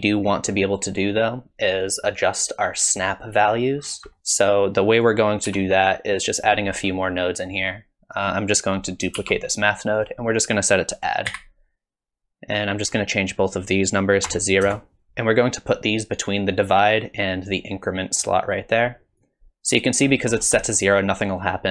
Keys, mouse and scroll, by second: 3.8-4.2 scroll down 8, 4.2 middle click, 4.2 click, 5.5 g, 6.7-8.2 scroll up 5, 7.2 middle click, 8.2 click, 9.2 shift+d, 11.0 click, 12.6 click, 15.1 middle click, 15.1-15.7 scroll down 5, 16.2 click, 19.4 click, 20.0-21.6 scroll up 8, 20.6 middle click.